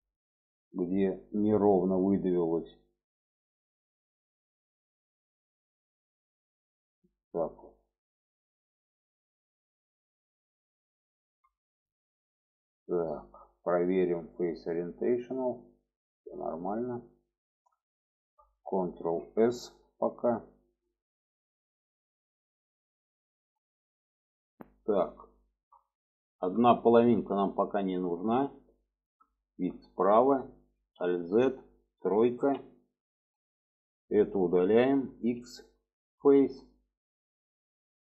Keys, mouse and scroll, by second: 0.4 click, 1.3-3.2 drag, 3.8 click, 4.5-6.8 drag, 7.2 shift+middle click, 8.1 click, 8.8-9.9 drag, 10.3 click, 10.8 alt+z, 11.3 middle click, 12.2 middle click, 13.9-16.3 drag, 16.6 middle click, 17.8 shift+middle click, 18.8 ctrl+s, 19.2 middle click, 20.2 middle click, 21.3 shift+middle click, 22.2 shift+middle click, 23.0 shift+middle click, 25.3 shift+middle click, 26.0 alt+middle click, 26.9 shift+middle click, 28.0-29.0 middle drag, 29.5 shift+middle click, 31.1 alt+z, 32.5 3, 33.0 click, 35.3 x, 36.9 shift+middle click.